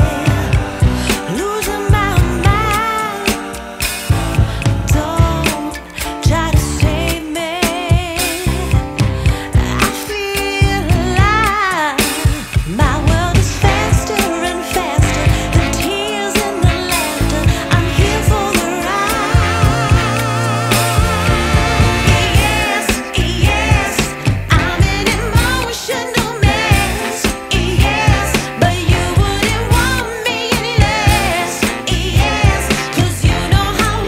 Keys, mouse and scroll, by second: 7.8-9.3 middle drag, 9.3-11.9 drag, 11.9-12.7 middle drag, 12.7-13.8 scroll up 6, 13.8-14.7 drag, 18.4 middle click, 19.2-22.3 drag, 23.1 click, 23.5-24.2 scroll down 6, 24.8-27.8 drag, 28.4 scroll up 6, 29.2-29.9 scroll down 5, 29.9 click, 31.4 click, 32.8-34.0 drag.